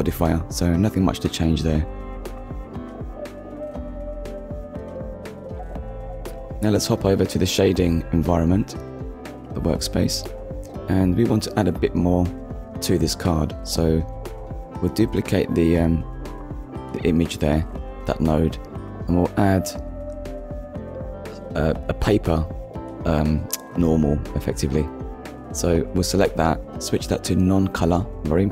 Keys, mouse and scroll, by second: 0.3 click, 0.9 ctrl+s, 1.6 shift+middle click, 6.2 click, 6.8 click, 8.1 middle click, 8.7-9.1 scroll up 1, 9.8 click, 10.8 middle click, 13.7 click, 14.7 shift+d, 16.3 click, 16.8 middle click, 17.4 scroll up 1, 18.0 click, 19.7 click, 21.1 click, 23.2 click, 24.9 click, 26.1-26.5 scroll down 1, 27.0 click, 28.1 click.